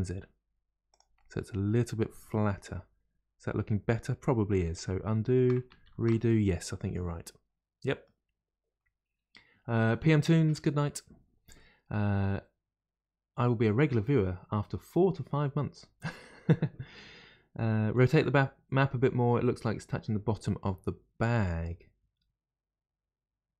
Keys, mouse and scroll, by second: 1.2-4.3 middle drag, 5.0 ctrl+z, 5.9 ctrl+shift+z, 6.9-9.9 middle drag.